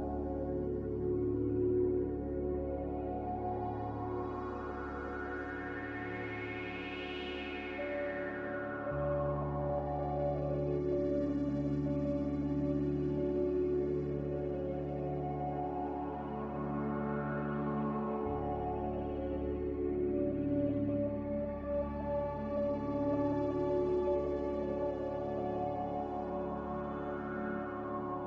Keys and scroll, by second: 0.0 a, 14.0 m, 20.2 n.